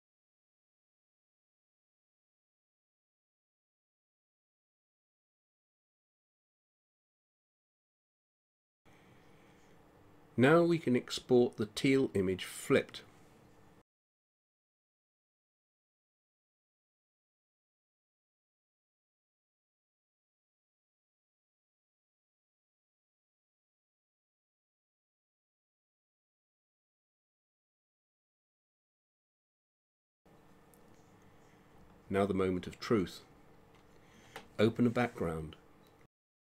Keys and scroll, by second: 7.9 ctrl+0, 18.5-21.2 typing.